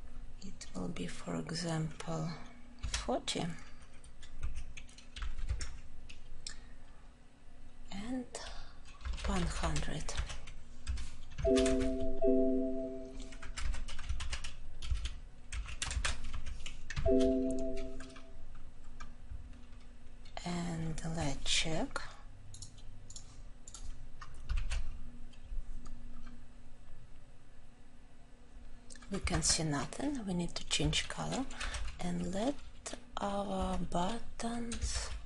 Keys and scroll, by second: 15.4 ctrl+;, 31.5 ctrl+;.